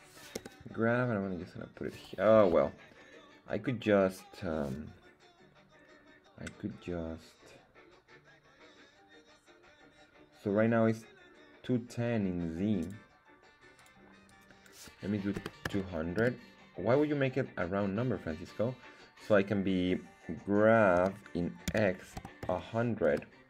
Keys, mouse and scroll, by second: 0.3 g, 2.3 Escape, 12.8-17.2 drag, 15.7 KP_0, 21.0-22.5 typing, 23.0 Return.